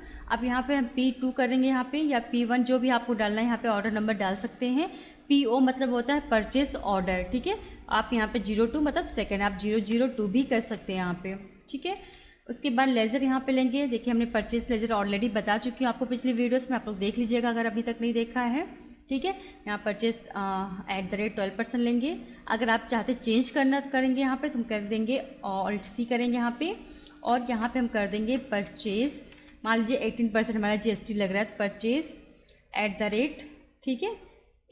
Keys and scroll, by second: 9.8 BackSpace, 10.3 0, 10.7 2, 12.0 Return, 26.1 alt+c, 27.5-30.2 typing, 31.8 space, 33.1 shift+2.